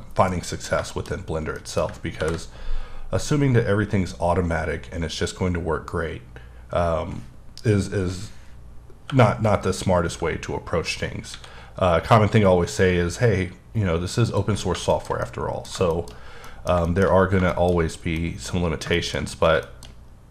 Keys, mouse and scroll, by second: 0.3 middle click, 1.1-1.5 scroll up 1, 1.5 middle click, 2.2 ctrl+b, 4.4 scroll down 1, 5.2-5.9 scroll down 7, 5.9-6.5 scroll down 2, 6.5-7.2 scroll up 1, 8.3 scroll down 1, 8.5-9.1 scroll up 1, 9.1 p, 10.1 p, 11.3 a, 14.2 click, 14.6-14.9 scroll down 1, 14.9 shift+middle click, 15.8 shift+scroll up 1, 16.1-16.4 shift+scroll down 1, 16.4 middle click, 17.1-18.1 shift+scroll up 5, 17.5 shift+middle click, 18.1 middle click, 18.6 scroll up 2, 18.9 shift+middle click, 19.2-19.5 scroll up 1, 19.6 middle click, 19.8-20.3 scroll up 1.